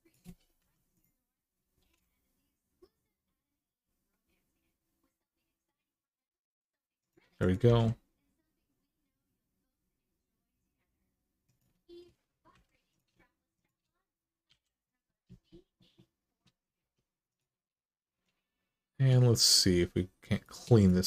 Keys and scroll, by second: 0.4 1, 1.6 g, 7.4 g, 12.3 2, 14.3 f, 16.6 1.